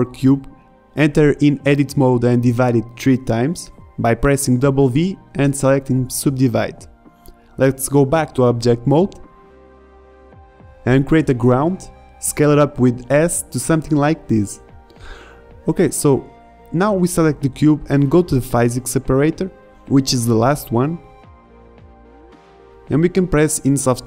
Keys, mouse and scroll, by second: 0.0 n, 0.5 KP_5, 1.6 Tab, 4.6 w, 6.1 w, 7.6 w, 10.0 KP_5, 10.4 Tab, 11.5 shift+a, 13.5-14.1 middle drag, 14.1 s, 19.0 middle drag, 19.4 right click.